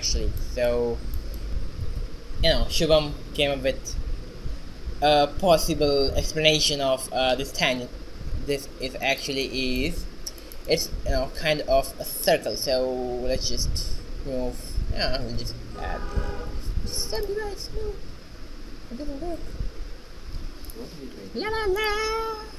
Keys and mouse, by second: 6.4 shift+z, 7.7-9.8 right drag, 8.6 alt+r, 10.2 shift+z, 12.4 middle click, 15.0 Tab, 15.8 a, 16.6 w, 20.2 ctrl+z, 20.5 x, 21.1 shift+a.